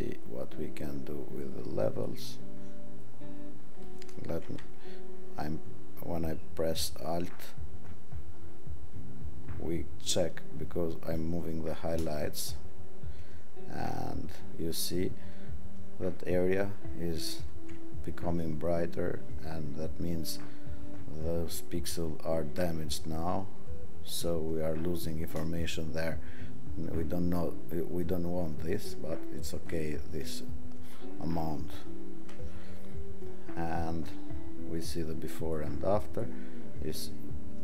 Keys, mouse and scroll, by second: 31.7-37.6 alt+drag.